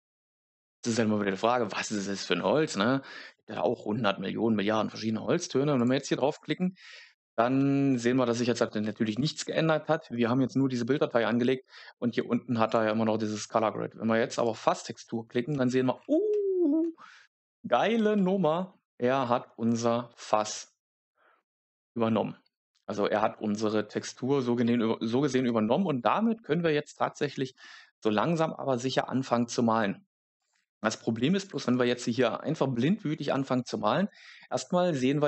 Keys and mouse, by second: 12.6 click, 27.1 shift+middle click, 30.3-31.5 drag.